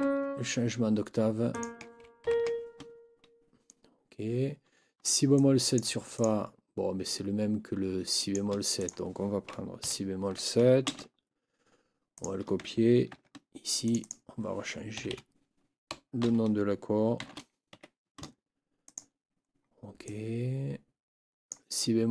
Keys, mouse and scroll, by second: 0.0 ctrl+Up, 1.5 click, 2.2 ctrl+Up, 5.4-6.0 drag, 6.2 click, 8.2 click, 8.8 click, 9.8 shift+Down, 10.8 ctrl+c, 12.2 click, 13.1 ctrl+v, 13.8 click, 15.0 Right, 17.2 shift+f, 17.7 shift+Escape, 18.8 click, 20.0-21.7 drag.